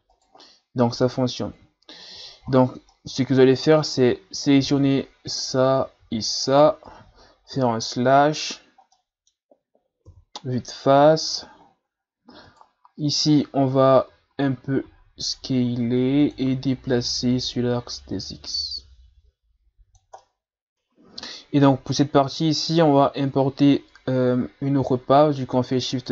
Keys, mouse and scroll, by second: 0.4-1.5 middle drag, 1.5 ctrl+z, 2.0 ctrl+z, 2.5 ctrl+scroll up 1, 2.9-4.5 middle drag, 4.5-4.8 scroll down 4, 4.8 Tab, 5.3 right click, 6.5 shift+right click, 7.5 KP_Divide, 8.9-10.1 middle drag, 10.1 KP_1, 10.9-11.7 scroll up 4, 11.7-12.0 shift+scroll down 2, 12.0-12.4 scroll up 4, 12.4 right click, 12.9-13.7 scroll down 3, 13.7 Tab, 14.1 a, 14.3 a, 14.9 s, 17.3-20.2 drag, 20.2 middle click, 20.7 Delete, 22.4 ctrl+scroll down 2, 23.2 shift+a.